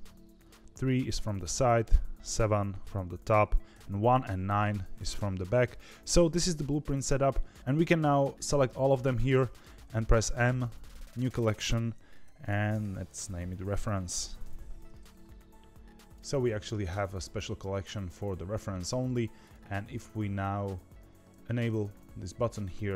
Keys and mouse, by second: 1.8 KP_7, 3.7 KP_1, 4.2 KP_9, 8.0 click, 10.1 m, 16.3 click, 19.2 click.